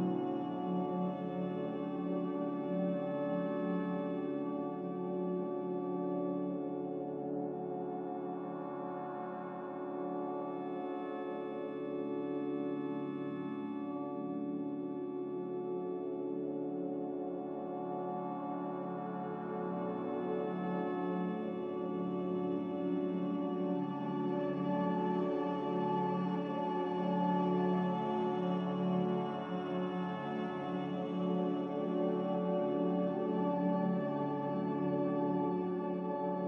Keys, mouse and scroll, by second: 10.3 z, 12.9-15.3 typing, 19.3 5, 19.4 Return, 20.4 z, 25.8 a.